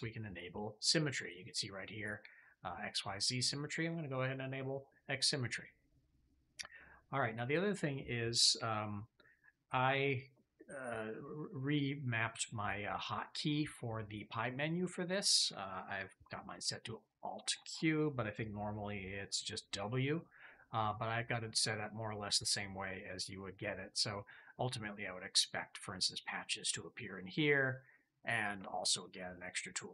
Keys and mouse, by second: 3.7 click, 4.4-7.4 drag, 13.4-14.9 drag, 16.5 alt+q.